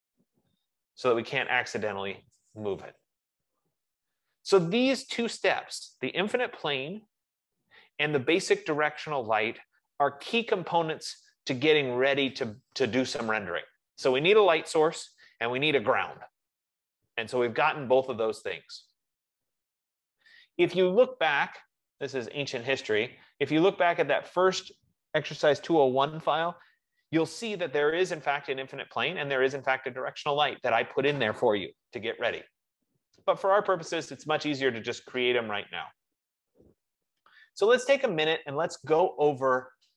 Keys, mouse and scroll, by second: 1.7 click, 22.5 click, 35.3 F15.